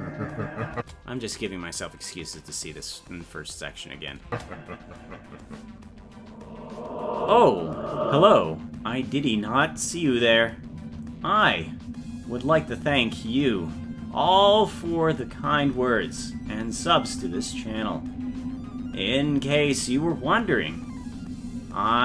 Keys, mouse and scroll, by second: 1.2 space.